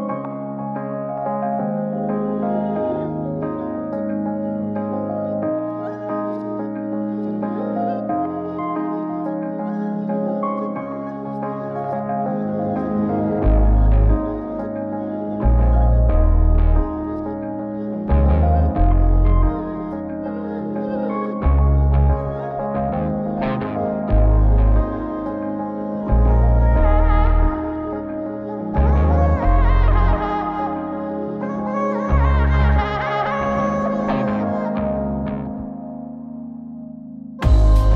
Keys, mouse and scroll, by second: 0.9 click, 1.9-2.7 middle drag, 3.2-3.7 scroll up 1, 3.7 click, 4.0-4.4 middle drag, 5.0 Tab, 6.2 z, 7.3 Tab, 8.8 click, 9.5 Tab, 10.5 a, 11.2 KP_Decimal, 16.3 Tab, 17.8 click, 18.6-20.0 scroll down 7, 20.0 KP_Decimal, 20.6-21.3 scroll down 1, 21.3 scroll down 1, 21.7 click, 23.1-24.2 drag, 24.8-26.8 drag, 25.9 KP_1, 27.1-29.0 drag, 29.9 click, 31.0 click, 32.2 click, 33.5 z, 34.0-34.4 middle drag, 36.5-37.9 drag.